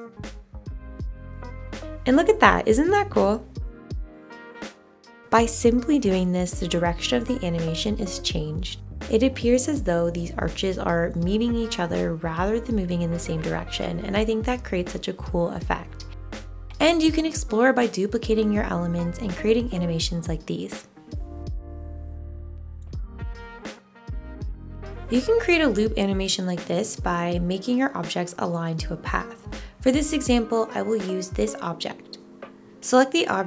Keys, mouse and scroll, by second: 0.3 0, 1.4 0.